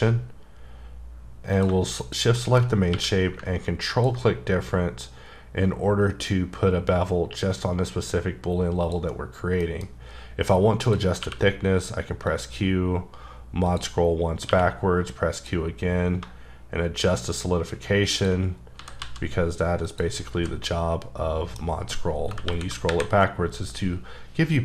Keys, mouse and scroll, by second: 1.5 click, 2.3 shift+middle click, 2.7 scroll up 1, 2.9 q, 3.9 ctrl+click, 8.8 click, 9.1-9.6 scroll down 3, 9.6 middle click, 9.9-10.9 scroll up 4, 10.9 click, 11.2 q, 12.3 click, 13.2-13.7 scroll down 1, 13.7 click, 14.0 scroll up 3, 14.5 q, 15.3 click, 18.5-18.8 scroll down 3, 18.8 typing, 19.8 click, 20.2-20.6 scroll down 4, 20.3 h, 20.6 middle click, 22.5 KP_1, 22.9 KP_3.